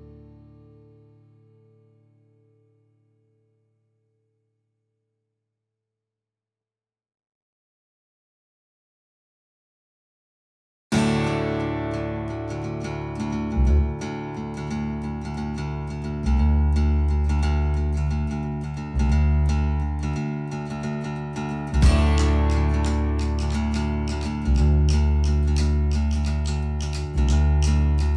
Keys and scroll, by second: 10.5 space, 10.9 Escape, 17.2 Delete, 22.5 Right, 23.7-25.5 typing, 26.8 BackSpace, 27.0 space.